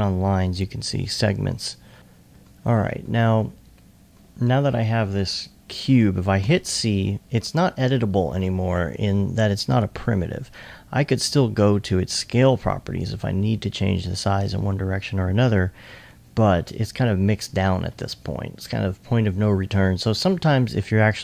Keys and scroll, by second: 6.5 alt+c.